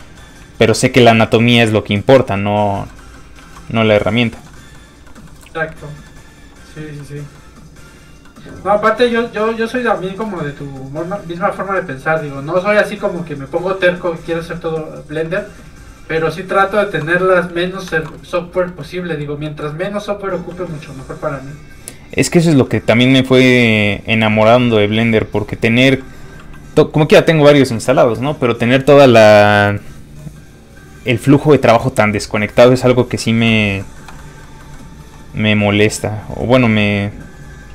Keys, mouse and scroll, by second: 0.0 middle click, 0.6 middle click, 2.7 shift+middle click, 3.0 middle click, 3.1 middle click, 3.4 shift+middle click, 4.0 shift+click, 4.3 shift+middle click, 4.8 middle click, 4.8 scroll up 1, 5.1 middle click, 5.3 shift+middle click, 6.4 middle click, 6.4 f, 6.5 click, 7.0 middle click, 9.0 shift+space, 10.1 shift+click, 12.3 click, 15.1 shift+f, 15.2 click, 17.9 shift+middle click, 18.1 middle click, 18.2 middle click, 20.5 f, 20.6 click, 21.0 ctrl+click, 22.5 ctrl+z, 23.0 f, 23.1 click, 24.9 middle click, 25.8 f, 26.0 click, 33.8 shift+middle click, 34.2 middle click, 34.3 middle click, 35.0 f, 35.1 click.